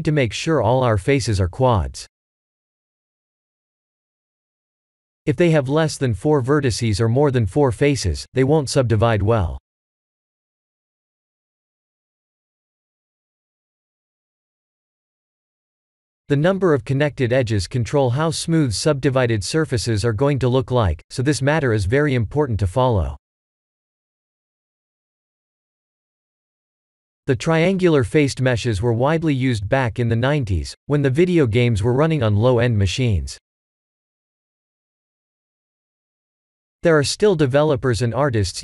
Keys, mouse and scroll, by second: 0.6 shift+middle click, 0.7 shift+middle click, 1.8 click, 2.7 click, 3.1 middle click, 4.5 middle click, 4.7 Tab, 5.4 middle click, 6.0 Tab, 6.3 shift+middle click, 7.1 click, 7.5 Tab, 7.8-9.0 scroll up 7, 11.7-12.8 scroll down 5, 12.8 Tab, 12.8-13.4 scroll down 1, 13.4-13.9 scroll down 3, 14.0 middle click, 18.3 middle click, 21.2 ctrl+z, 21.4 Tab, 22.7 click, 23.9 click, 25.3 click, 26.8-27.8 scroll up 3, 27.2 click, 27.8 Tab, 28.5 Tab, 28.8-29.4 scroll up 2, 29.4-29.9 scroll up 2, 30.0 middle click, 35.3-35.9 scroll down 5, 35.9 Tab, 36.6 Tab, 37.2 x, 38.3 click.